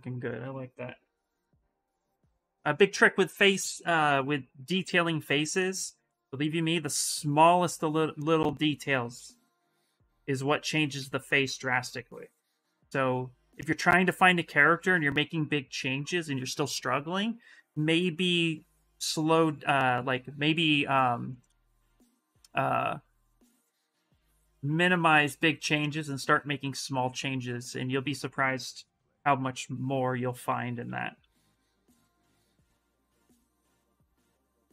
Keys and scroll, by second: 1.8 Return, 2.3 Return, 9.0-10.7 typing, 12.3 s, 15.5 s, 26.2 s, 30.2 s, 31.0 space.